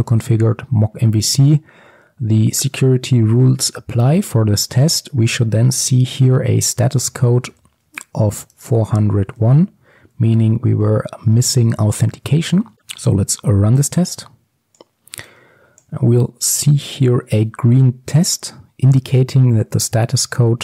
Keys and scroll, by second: 8.6 Return, 11.4 ctrl+x, 12.3 ctrl+s.